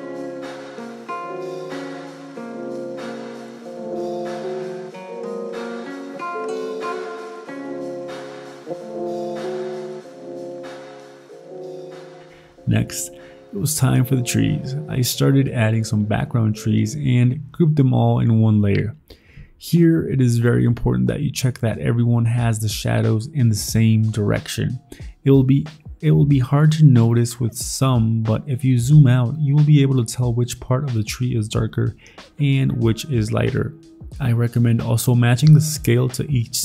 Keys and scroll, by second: 0.3 Down, 0.5 Up, 0.6 Up, 1.0 ctrl+t, 1.6 ctrl+i, 1.9 Left, 1.9 Left, 2.2 Up, 2.8 ctrl+t, 3.9 ctrl+d, 4.3-5.7 typing, 6.9 alt+Tab, 7.5 ctrl+t, 8.3 ctrl+t, 8.9 ctrl+z, 9.0-10.0 typing, 12.2 alt+Tab, 15.0 ctrl+t, 15.9 ctrl+z, 17.3 ctrl+t, 20.8 alt+Tab, 23.5 alt+Tab, 24.7 alt+Tab, 29.4 alt+Tab, 32.0 alt+Tab, 34.9 ctrl+t, 35.4 ctrl+j, 35.6 ctrl+t.